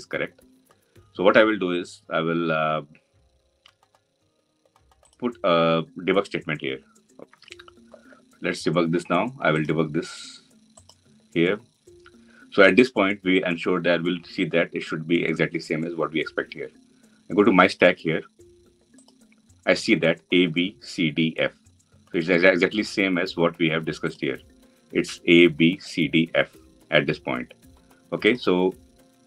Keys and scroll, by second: 4.8 ctrl+F8.